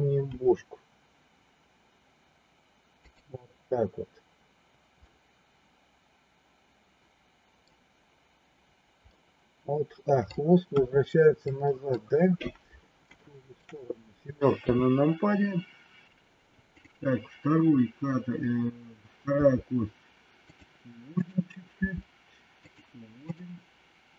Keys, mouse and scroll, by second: 0.2 r, 5.1-7.6 middle drag, 9.1-10.2 middle drag, 10.7 KP_1, 11.3 middle click, 13.2 shift+middle click, 14.6 KP_7, 19.3 r, 21.2 click, 21.7 r, 23.3 click.